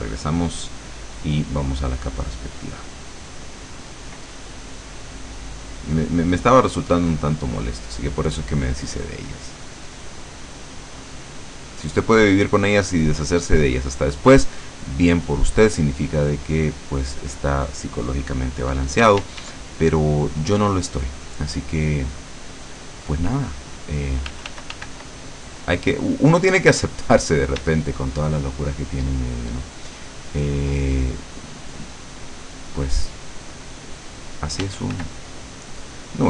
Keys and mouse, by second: 0.6 click, 5.7 click, 7.4 click, 9.7-13.9 drag, 14.0 click, 15.2-16.6 drag, 19.1 d, 19.9 click, 22.1 click, 23.6 click, 24.4 f, 25.2-26.8 drag, 27.0 click, 27.7 d, 28.0-30.9 drag, 31.8-33.3 drag, 34.2 click, 34.7 f, 35.0-36.0 drag.